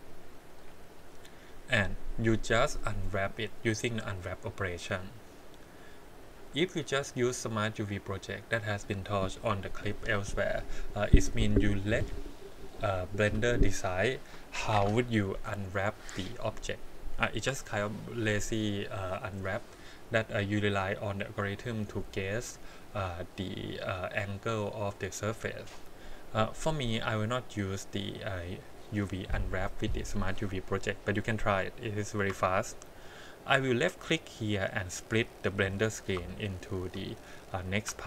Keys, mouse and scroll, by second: 2.3 a, 3.4-6.4 drag, 22.8 click, 28.0 click, 31.2-32.2 shift+middle drag, 34.1 click, 36.4 shift+middle click, 36.9 shift+scroll down 1, 37.1 scroll up 4.